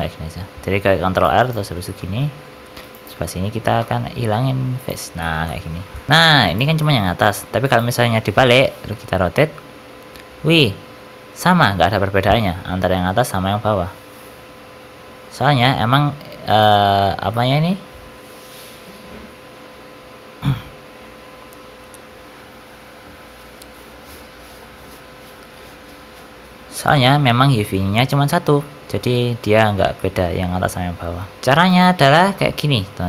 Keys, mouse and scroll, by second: 1.7 shift+middle click, 2.7 3, 2.8 click, 3.7 x, 5.1 shift+middle click, 5.4 middle click, 5.7 shift+middle click, 5.7 Tab, 6.1 shift+middle click, 6.1-6.4 scroll up 1, 6.4 click, 6.7 shift+middle click, 7.5 click, 8.5 r, 17.2 middle click, 17.7 scroll up 1, 28.5 middle click, 29.5 shift+middle click, 29.9 middle click, 30.3 r, 32.0 scroll down 2, 32.3 middle click, 32.9-33.0 scroll up 1.